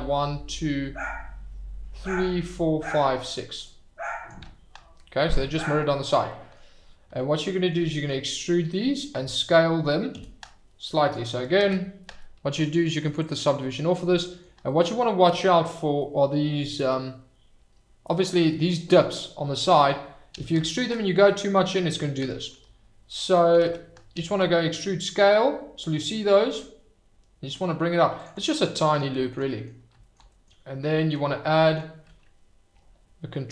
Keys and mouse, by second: 6.3 click, 7.5 click, 10.2 e, 10.3 s, 11.0 Escape, 12.7 ctrl+z, 13.2 click, 13.9-14.4 drag, 15.3 click, 19.5 click, 20.3 e, 20.5 s, 22.2 Escape, 22.7 click, 23.6 ctrl+z, 24.1 e, 24.4 s, 28.9 click, 29.6 click, 30.3 click.